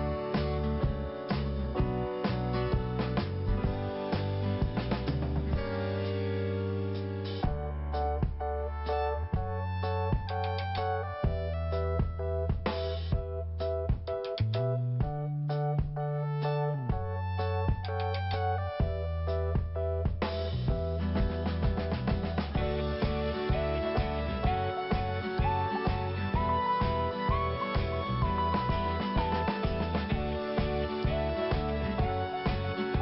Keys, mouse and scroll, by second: 1.5 scroll down 1, 2.5 click, 4.7-5.1 scroll down 1, 5.1 scroll up 1, 6.8 click, 8.0 click, 13.6 scroll up 1, 15.4 click, 16.8 click, 17.1 click, 17.6 scroll up 1, 19.4 scroll up 1, 22.2 click, 22.8-23.2 scroll down 1, 23.2-23.6 scroll up 1, 24.4 click, 26.6 scroll down 1, 27.6 click, 29.7 scroll up 1, 30.5 click, 30.7 double click, 31.4 double click.